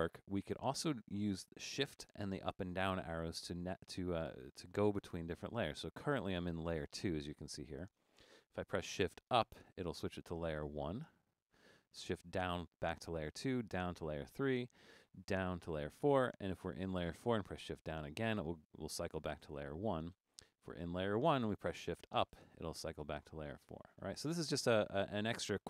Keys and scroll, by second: 9.6 shift+Up, 12.5 shift+Down, 13.8 shift+Down, 15.4 shift+Down, 18.3 shift+Down, 22.3 shift+Up, 23.8 shift+Up, 24.3 shift+Up, 25.1 shift+Up, 25.5 shift+Down.